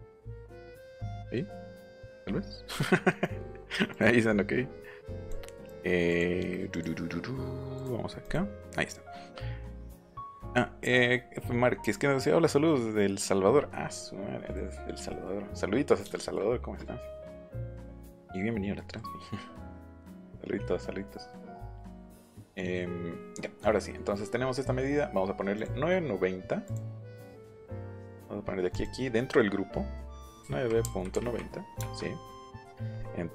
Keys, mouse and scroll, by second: 1.9 click, 3.9 click, 5.2 click, 6.0 click, 6.7 click, 7.7 click, 8.2 click, 14.5 middle click, 15.1 middle click, 17.7 middle click, 18.8 middle click, 19.9 middle click, 24.2 middle click, 25.5 click, 26.6 click, 28.7 click, 30.4 KP_9, 30.8 KP_Decimal, 31.1 KP_9, 31.8 KP_Enter.